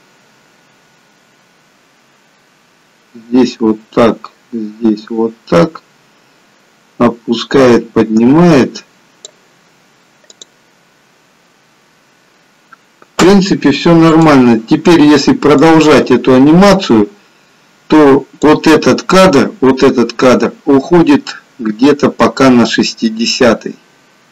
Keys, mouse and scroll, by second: 10.4 click, 14.4 click, 15.9 click, 22.1 click.